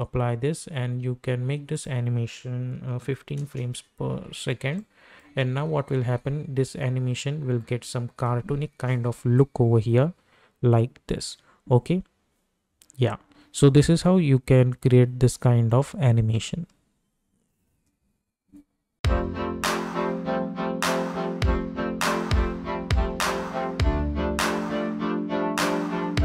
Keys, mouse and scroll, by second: 1.7 click, 3.4 Return, 4.7 click, 5.2 space, 17.7 space.